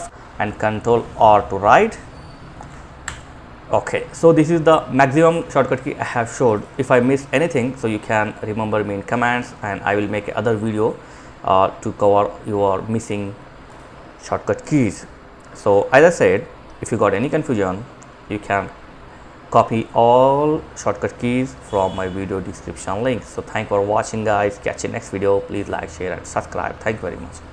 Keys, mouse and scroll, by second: 0.1 ctrl+r, 2.4 ctrl+j.